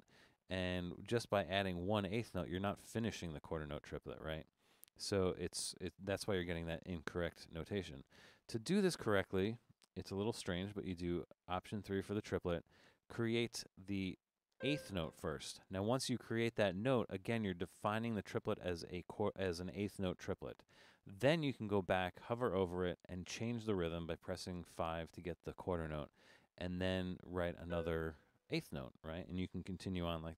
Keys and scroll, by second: 6.1 BackSpace, 11.7 alt+3, 14.0 Up, 14.6 4, 21.7 Left, 22.3 Down, 24.6 5, 26.5 Up, 27.7 4.